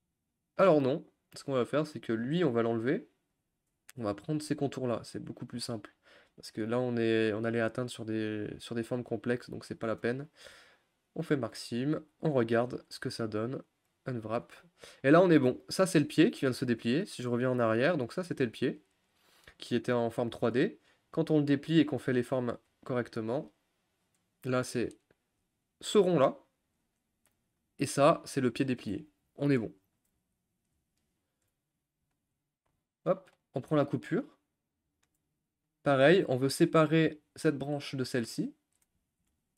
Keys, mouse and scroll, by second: 1.3 click, 3.4 u, 4.0 click, 5.1-6.9 middle drag, 6.9-7.3 scroll up 1, 7.3-11.3 middle drag, 11.3 u, 11.5-12.0 scroll down 2, 12.0 a, 12.2-13.8 scroll down 2, 13.8 u, 16.8 ctrl+z, 17.9-23.7 drag, 23.7 u, 24.7 click, 25.1 middle click, 25.4-26.1 scroll up 1, 29.8-30.1 scroll down 5, 30.1 middle click, 31.1 click, 31.5-33.1 middle drag, 33.1 shift+click, 33.4 shift+click, 34.2-36.2 middle drag, 36.2-36.6 scroll down 2, 36.6-38.3 shift+middle drag, 38.3-39.5 scroll up 2.